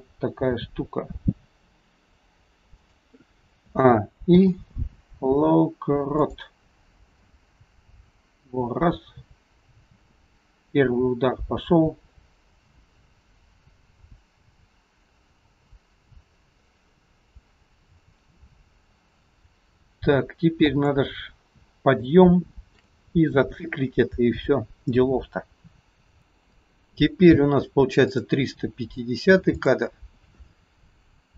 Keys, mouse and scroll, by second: 0.5 r, 3.8 a, 4.3 i, 7.2 click, 22.0 shift+middle click, 28.1 click, 29.6 click.